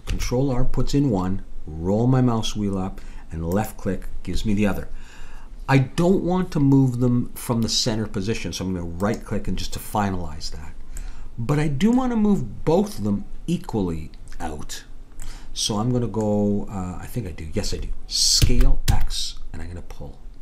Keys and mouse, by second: 0.1 ctrl+r, 11.0-12.7 middle drag, 15.3 middle click, 18.4 s.